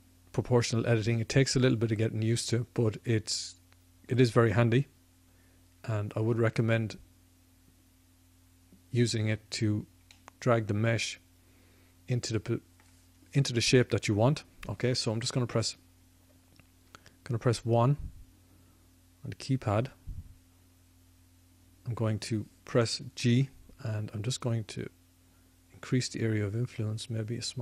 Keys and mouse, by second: 1.6-3.3 drag, 10.0-13.4 middle drag, 13.9 middle click, 15.1 KP_1, 15.2 KP_1, 23.2 g.